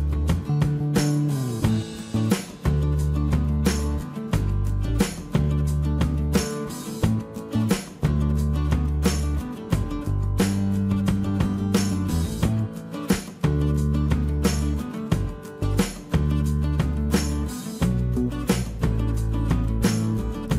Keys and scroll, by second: 2.8 shift+space, 5.9 space, 5.9 Escape, 6.0 Escape, 6.1 Escape, 13.3 t.